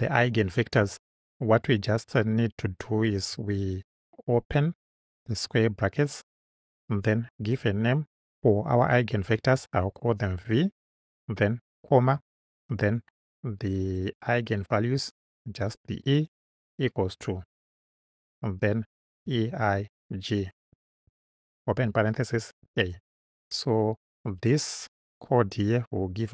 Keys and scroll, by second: 5.3 [, 10.1 shift+v, 12.0 ,, 15.0 shift+e, 16.3 Right, 18.1 =, 19.3-21.1 typing, 22.4 shift+a.